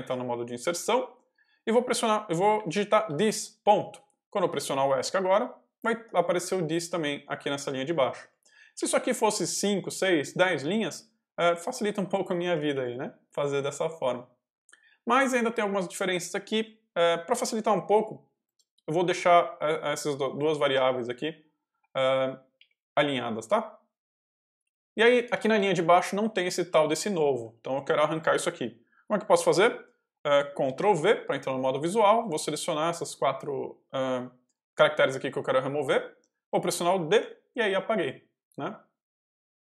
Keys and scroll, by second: 2.2-3.3 typing, 5.9 Escape, 6.5-9.4 typing, 12.4 k, 14.8 l, 18.0-23.2 typing, 19.0 Escape, 24.9 j, 26.4-27.8 typing, 30.6 ctrl+v, 31.1 ctrl+y, 31.6 |, 37.1 d.